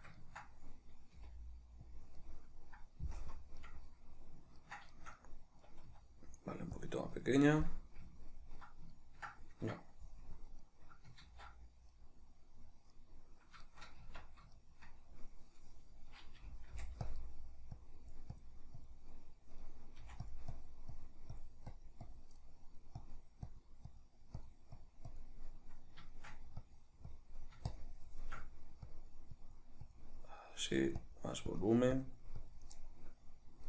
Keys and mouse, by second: 1.1 g, 2.0 click, 2.2-6.9 middle drag, 3.2 KP_Decimal, 5.9 s, 6.9 click, 7.1-14.6 middle drag, 10.3 KP_Decimal, 11.7 ctrl+z, 14.1 Tab, 16.4 g, 17.1 click, 17.2 middle click, 17.8-19.1 drag, 19.1 middle click, 20.0 middle click, 20.0 f, 20.5-22.4 drag, 22.4 middle click, 23.0-25.5 drag, 25.5-26.6 middle drag, 26.6 click, 27.4 middle click, 27.7 shift+click, 28.4 middle click, 28.8-30.2 drag, 30.2 middle click, 31.0-32.7 drag, 32.7-33.6 middle drag.